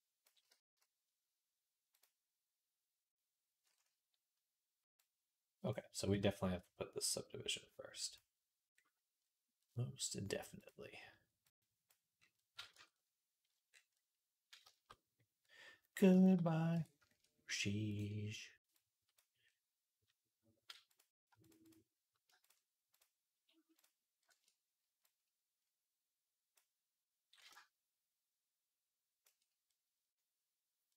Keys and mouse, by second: 0.3 z, 8.8 middle click, 9.5-12.6 drag, 12.6 Tab, 16.6 Tab.